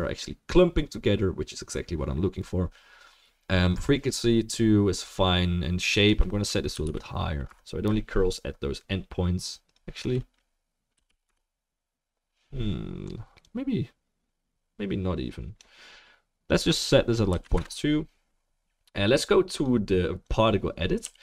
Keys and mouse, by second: 21.0 f.